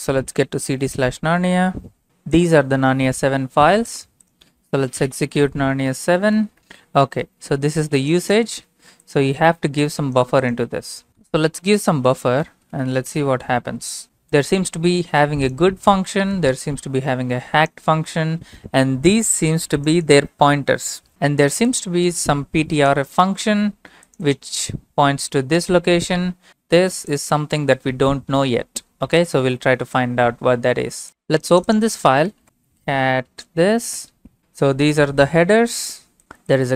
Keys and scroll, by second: 0.0-1.5 typing, 5.5-6.4 typing, 6.1 Tab, 6.6 Return, 12.8 typing, 13.2 Return, 32.2-33.3 typing, 34.0 Return.